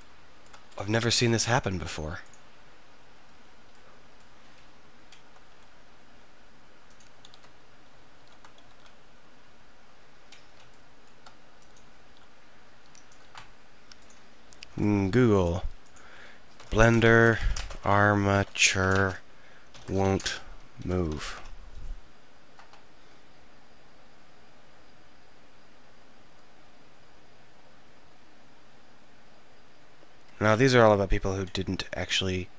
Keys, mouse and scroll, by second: 3.8-4.1 drag, 5.5 r, 7.0-9.0 drag, 7.3 shift+r, 8.2 shift+r, 8.7 alt+r, 11.7-15.3 right drag, 12.1 r.